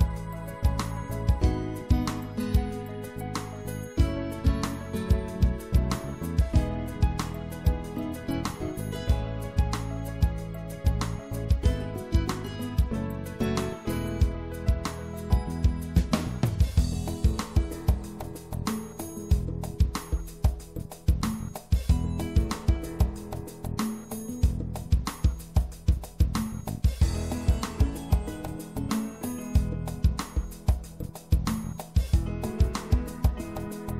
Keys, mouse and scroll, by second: 3.4-5.0 middle drag, 5.0 s, 14.7-17.1 middle drag, 18.0-20.3 middle drag, 20.3-23.1 drag, 23.1-25.5 middle drag, 26.4-27.4 shift+middle drag, 30.4-32.5 middle drag.